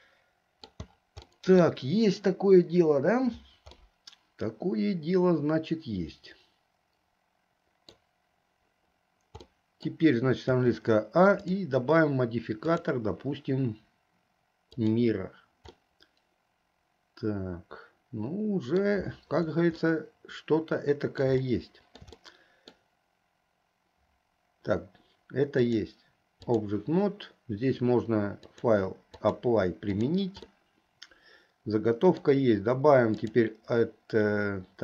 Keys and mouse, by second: 1.4 middle click, 4.0-8.1 middle drag, 9.6 middle click, 10.7 a, 11.5 click, 12.8-15.1 drag, 15.9-19.0 middle drag, 20.0-21.4 middle drag, 21.6 shift+middle click, 22.4 middle click, 25.6-26.8 drag, 28.5-29.6 drag, 29.9 click, 30.6-32.4 middle drag, 33.2-34.8 drag.